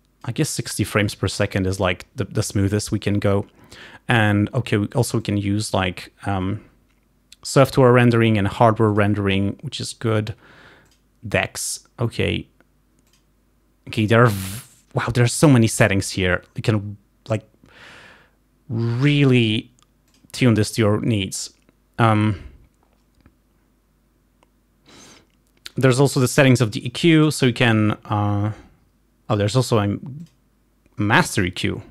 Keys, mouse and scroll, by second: 5.3 click, 9.1 click, 15.8 click, 26.9 click, 30.4 click.